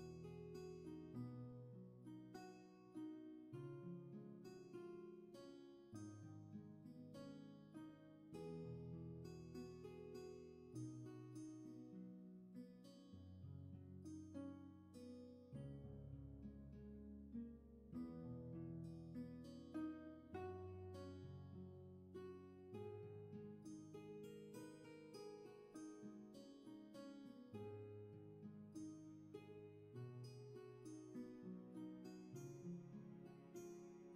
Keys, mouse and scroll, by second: 0.0 ctrl+z, 12.7 ctrl+z, 14.8 ctrl+z, 17.9 ctrl+z, 26.7 ctrl+z, 33.4 ctrl+z.